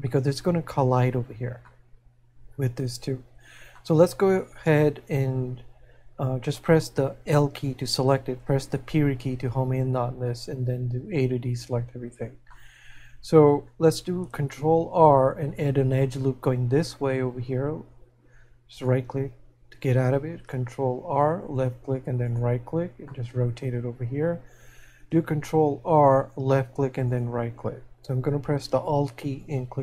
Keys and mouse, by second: 1.7 middle click, 7.3 l, 12.5 middle click, 23.1 middle click.